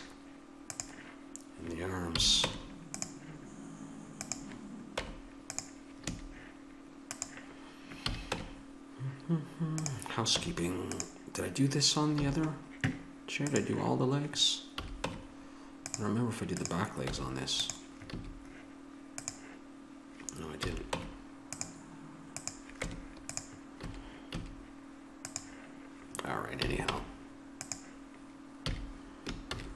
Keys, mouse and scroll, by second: 2.1 a, 2.4 Tab, 4.3 right click, 4.9 Tab, 5.5 Tab, 6.0 a, 8.0 a, 8.3 Tab, 9.8 right click, 10.3 Tab, 12.2 a, 14.8 a, 15.0 Tab, 17.0 Tab, 18.1 a, 20.6 a, 20.9 Tab, 22.8 Tab, 23.8 a, 24.3 a, 26.6 a, 26.8 Tab, 28.6 a, 29.5 ctrl+s.